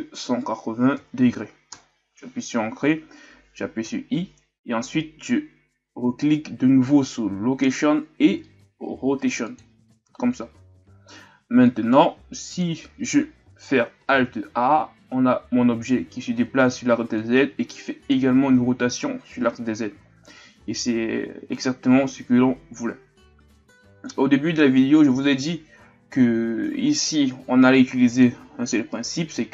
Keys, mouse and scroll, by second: 22.1 alt+a, 28.2-29.5 drag.